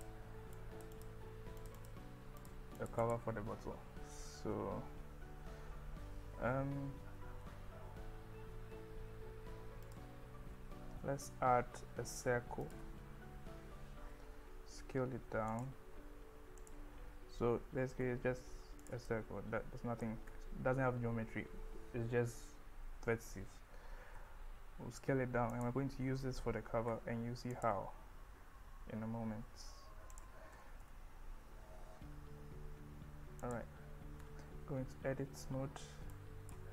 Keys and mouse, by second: 0.0 click, 0.6 click, 1.8 click, 2.4 click, 2.8 click, 3.1 click, 6.9 Tab, 11.1 shift+a, 15.5 click, 16.0 s, 16.6 click, 17.6 g, 18.0 z, 18.8 click, 19.1-20.0 middle drag, 20.3 KP_1, 24.2 s, 25.5 click, 27.0 s, 27.5 click, 30.2 click, 30.5 g, 30.8 z, 33.5 click, 34.3 Tab, 36.1 click.